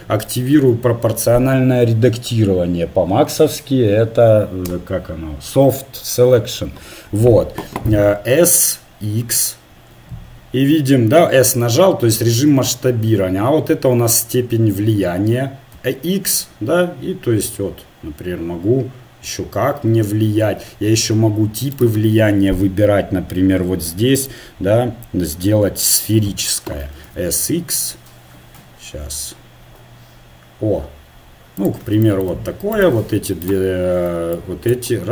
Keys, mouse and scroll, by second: 0.6 o, 9.7 s, 24.2 click, 25.8 click, 26.1 click, 27.0 s, 32.7-35.1 right drag, 34.7-35.1 drag.